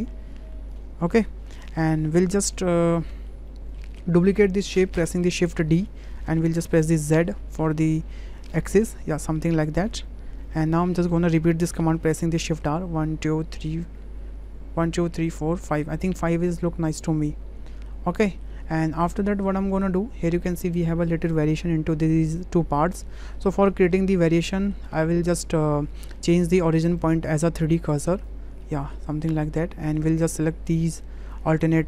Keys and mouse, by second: 1.1-1.9 middle drag, 2.2 shift+click, 2.6 middle click, 3.1 shift+click, 3.5 middle click, 5.7 shift+d, 12.7 shift+r, 13.2 shift+r, 13.5 shift+r, 16.4-17.8 middle drag, 18.9-19.4 middle drag, 19.7 shift+middle drag, 20.9 shift+click, 24.6 click, 27.1-28.2 drag, 28.7 middle click, 29.4-30.0 middle drag, 30.7 shift+click, 31.3 click.